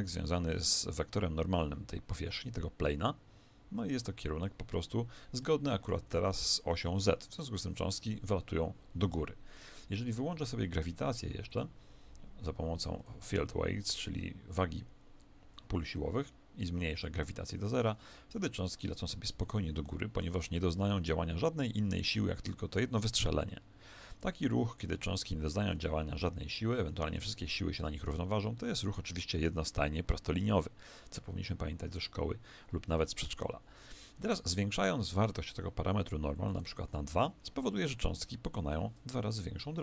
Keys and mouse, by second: 4.7-9.2 middle drag, 6.3 z, 11.5-14.8 drag, 18.3 alt+a, 19.4-22.4 middle drag, 26.8 Escape, 33.0-36.3 middle drag, 36.3 click, 39.3-39.8 middle drag, 39.3 KP_1.